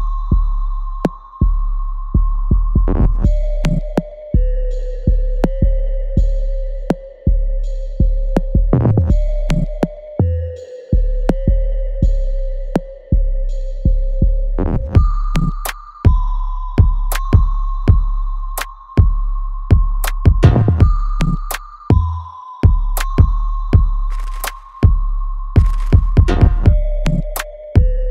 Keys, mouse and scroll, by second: 2.6 alt+right click, 2.9 alt+click, 3.6 alt+right click, 4.2 alt+click, 4.8 alt+middle click, 5.4 right click, 5.5-7.0 alt+right drag, 7.0-9.1 ctrl+drag, 9.1 right click, 9.6 click, 9.9 right click, 10.3 alt+click, 12.1 alt+right click, 12.8 alt+click, 13.2-14.7 alt+middle drag, 14.7 right click, 14.7 alt+right click, 15.4 click, 15.9 right click, 17.1 click, 17.8 alt+right click, 19.0 alt+click, 19.5 alt+middle click, 19.9 alt+right click, 20.9 alt+click, 21.4 alt+middle click, 21.8 alt+right click, 22.7 alt+middle click, 23.4 shift+click, 25.2 alt+right click, 25.6-27.2 alt+drag.